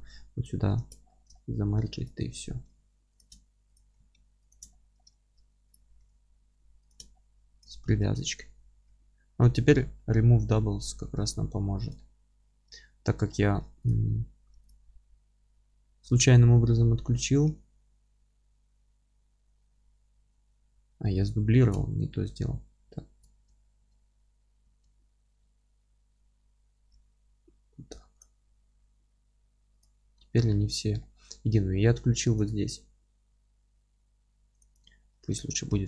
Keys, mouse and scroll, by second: 2.1 click, 2.6 g, 3.2 ctrl+click, 3.8 g, 4.7-5.7 middle drag, 4.9 scroll up 1, 5.7 click, 6.0 g, 7.1 scroll down 1, 7.4-7.9 scroll up 2, 7.6 Tab, 7.9 Tab, 8.4 click, 8.8 g, 9.7 scroll down 1, 10.0-13.9 middle drag, 10.3 a, 13.9 click, 14.1-14.7 scroll up 1, 14.7 click, 15.1 g, 16.2-16.9 scroll up 1, 16.9 a, 17.2-28.2 middle drag, 19.7-20.2 scroll down 1, 20.2 g, 21.2 scroll down 1, 21.8 ctrl+z, 23.4 Tab, 24.6 a, 27.5 scroll up 1, 28.2 click, 28.5 scroll up 1, 28.7 g, 29.8 click, 30.0 g, 30.7 scroll down 1, 31.0-35.8 alt+middle drag, 35.7 scroll down 1.